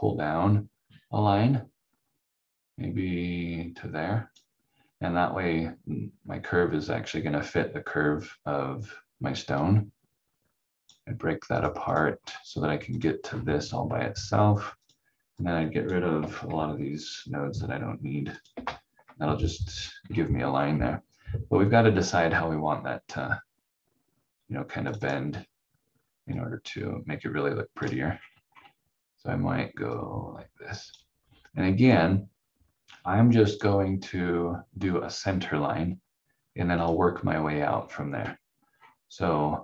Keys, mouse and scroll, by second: 9.5 click, 12.2-12.5 scroll down 1, 12.9 click, 13.2 scroll down 1, 14.8 click, 16.1 Delete, 18.3 click, 18.5 Delete, 19.6 scroll down 1, 20.1 scroll up 1, 25.0 click, 28.1-29.2 scroll up 1, 29.9 click, 33.8-35.7 scroll down 1, 36.8 click, 37.7-38.0 scroll down 1, 38.7-39.6 scroll up 1.